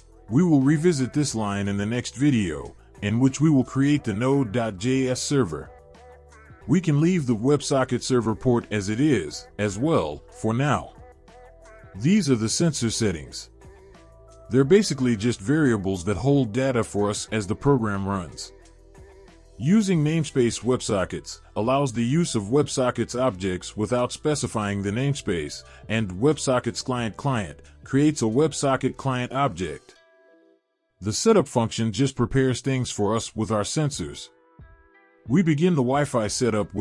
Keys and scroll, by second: 13.7 ctrl+v, 18.8 ctrl+v, 26.6 ctrl+v.